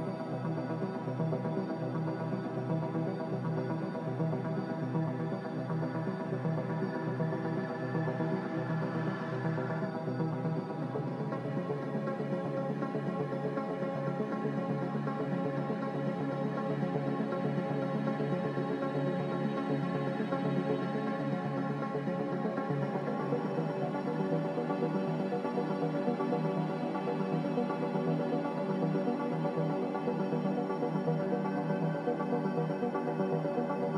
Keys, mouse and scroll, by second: 2.1 ctrl+g, 5.1 x, 9.8 x, 14.0 x, 17.9 click, 30.0 ctrl+g.